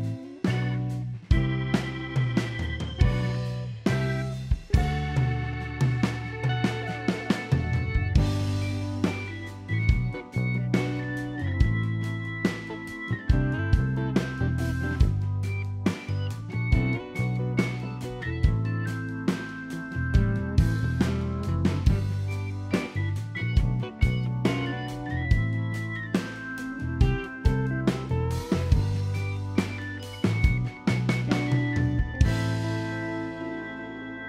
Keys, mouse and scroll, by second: 0.2 click, 0.7 middle click, 1.8 click, 1.8-2.2 scroll up 1, 2.3 middle click, 4.7 ctrl+click, 6.7 ctrl+click, 8.5 middle click, 9.0 scroll up 1, 9.4 g, 10.2 middle click, 11.2 middle click, 11.6 shift+middle click, 11.8 middle click, 12.3 ctrl+click, 12.8 middle click, 14.9 middle click, 15.5 click, 15.9 ctrl+z, 16.5 middle click, 16.8 click, 17.5 s, 17.9 middle click, 18.5 r, 18.9 g, 19.3 scroll down 4, 19.4 middle click, 19.7 scroll up 1, 20.0 middle click, 21.0 click, 21.5 middle click, 21.8 click, 22.4 middle click, 23.6-24.2 scroll up 1, 24.2 click, 24.9 click, 25.9 ctrl+r, 26.8 ctrl+click, 27.6 middle click, 27.8-28.2 scroll up 4, 28.0 shift+middle click, 28.5 g, 29.5-30.0 scroll down 3, 29.6 middle click.